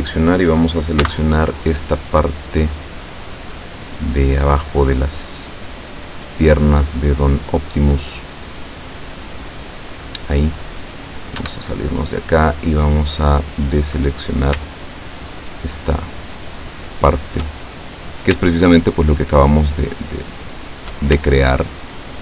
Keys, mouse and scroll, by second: 1.1 c, 1.7-10.4 drag, 11.4 Escape, 11.8-12.3 scroll up 1, 12.4 middle click, 14.0 middle click, 15.2 shift+right click, 15.8 shift+right click, 16.7 shift+right click, 17.5 shift+middle click, 19.0 shift+right click, 19.6 shift+right click, 21.9 shift+middle click.